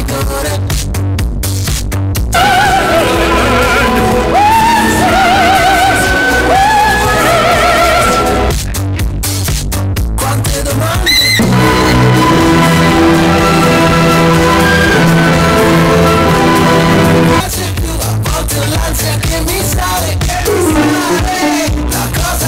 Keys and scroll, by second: 0.0 Page_Down, 8.5 Page_Down, 18.2 Page_Down.